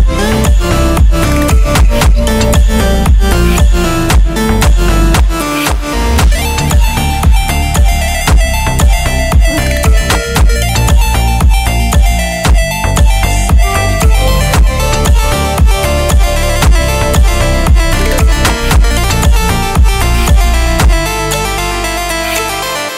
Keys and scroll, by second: 2.4 space.